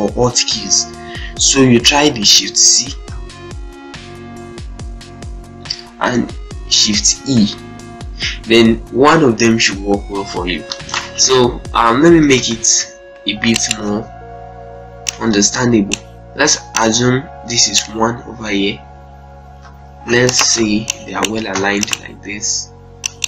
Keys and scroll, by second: 2.9 shift+c, 6.9 e, 8.5 shift+e, 12.2 ctrl+z, 13.1 z, 13.6 ctrl+space, 19.4 e, 20.4 z, 21.3 ctrl+space.